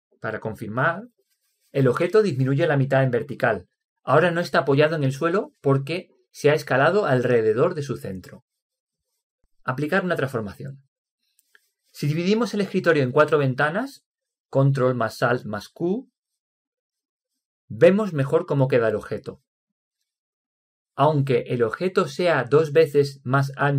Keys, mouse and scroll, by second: 1.6-3.6 middle drag, 16.1 ctrl+alt+q, 20.7-22.7 middle drag.